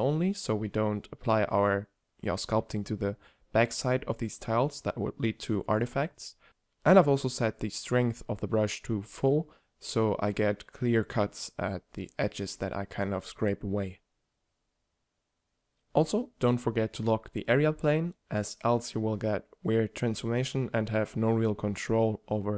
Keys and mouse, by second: 0.4 click, 1.1 f, 2.5 click, 2.5 right click, 3.8 f, 6.3-7.6 drag, 7.6 f, 9.0 f, 15.4-16.1 middle drag, 16.9-20.1 drag.